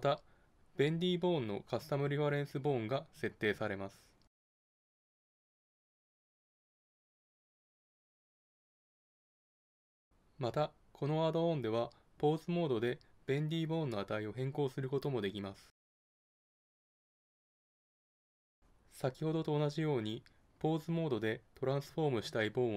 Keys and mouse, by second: 1.8-3.1 drag, 4.6 click, 15.8-18.5 middle drag, 20.5-22.7 drag.